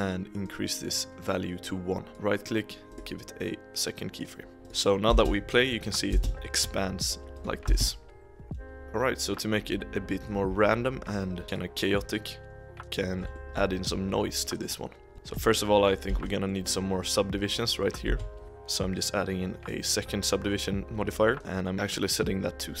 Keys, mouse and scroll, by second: 0.4-2.1 drag, 2.1-4.3 right drag, 4.6-5.1 drag, 5.1 space, 6.1 space, 6.4-7.3 shift+middle drag, 7.3-7.7 drag, 7.7 space, 8.8-11.2 drag, 11.4 scroll down 2, 11.4 click, 13.3 shift+middle drag, 13.6-14.4 scroll up 2, 15.1 shift+middle drag, 15.3 scroll up 1, 15.5 middle click, 16.0 z, 16.4-18.0 middle drag, 18.0 z, 18.4-20.8 drag, 21.4-22.8 scroll up 2.